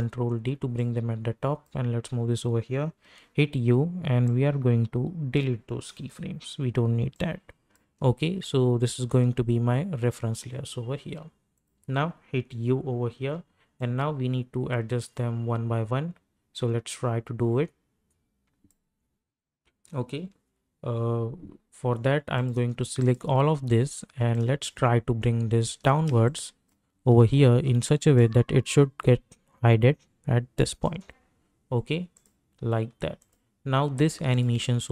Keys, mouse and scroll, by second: 0.7-3.0 drag, 3.0 u, 4.2-7.8 drag, 7.8 space, 11.5 click, 12.5 u, 13.2 u, 13.8-20.9 drag, 22.3 click, 23.0-26.1 shift+drag, 26.1 space, 26.2 click, 26.6 space, 27.1-27.9 alt+scroll up 1, 28.1-32.1 drag.